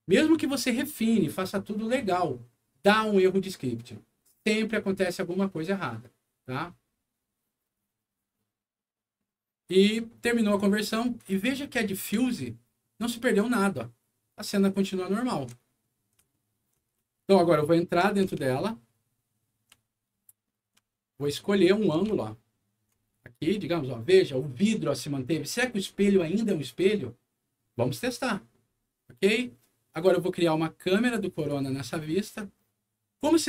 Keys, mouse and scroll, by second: 11.1 click, 12.2-15.3 alt+middle drag, 16.2 alt+middle click, 17.1-18.1 ctrl+alt+middle drag, 18.4-19.5 alt+middle drag, 19.8 alt+middle click, 20.8 alt+middle click, 22.1 ctrl+alt+middle click, 23.0 ctrl+alt+middle click, 31.3 click, 33.3 middle click.